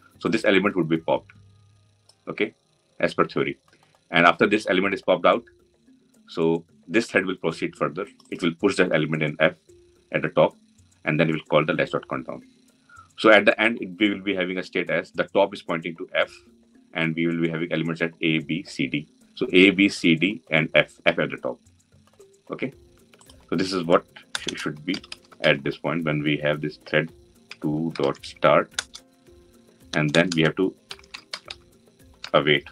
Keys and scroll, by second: 28.5 Return.